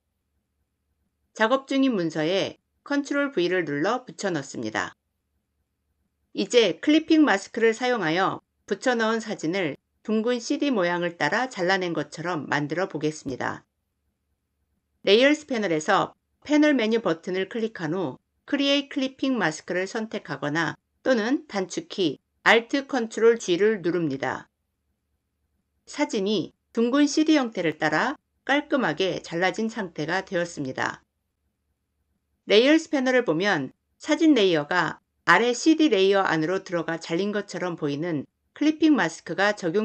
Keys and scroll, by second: 2.8 ctrl+v.